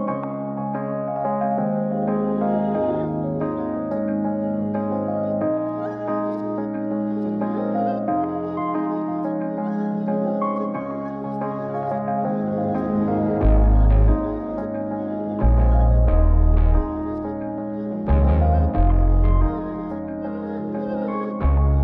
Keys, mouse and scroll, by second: 0.7 click, 1.2 Tab, 3.1 click, 4.7 g, 14.0 click, 15.0 g, 21.1 g.